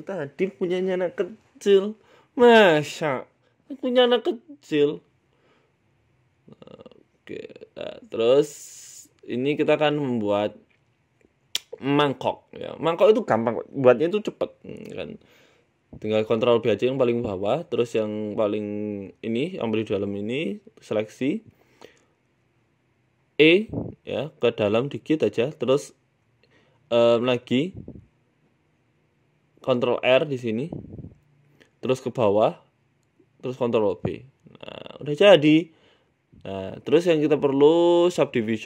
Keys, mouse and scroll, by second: 2.7 KP_1, 3.5 shift+middle click, 3.8 shift+a, 5.4 scroll up 1, 5.5 scroll down 1, 6.0-6.3 scroll up 1, 6.0 g, 6.9 shift+middle click, 7.2 s, 7.9 shift+middle click, 8.1 scroll up 2, 8.2 Tab, 8.4 shift+middle click, 8.8 click, 9.2 s, 9.8 g, 10.9 shift+middle click, 11.4 ctrl+b, 16.1-17.0 scroll up 5, 16.4 middle click, 17.1 a, 17.3 a, 17.6 alt+shift+right click, 18.0 a, 18.0 s, 18.7 right click, 19.2 alt+shift+right click, 19.9 a, 20.0 a, 20.7 alt+shift+right click, 21.0 alt+shift+Right, 21.3 KP_7, 21.9 KP_1, 22.5 scroll up 2, 23.5 shift+middle click, 24.0 e, 24.3 s, 24.8 middle click, 27.2 click, 29.6 ctrl+r, 30.8 KP_1, 31.4 g, 32.8 ctrl+b, 34.6 Tab, 34.8 middle click, 35.4-36.0 scroll down 7, 35.6 middle click, 36.0 KP_1, 36.7 click.